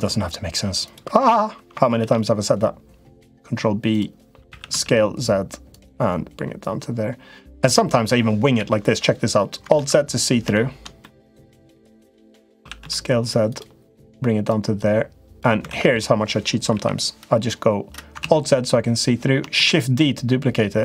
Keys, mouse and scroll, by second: 0.6 click, 1.0 l, 1.8 ctrl+b, 4.2 s, 6.4-7.5 drag, 8.3 KP_7, 9.5 alt+z, 10.4 shift+middle click, 10.8 middle click, 12.3 s, 13.3 s, 14.4 click, 15.5 alt+z, 16.5 KP_7, 18.0 alt+z, 19.3 shift+d.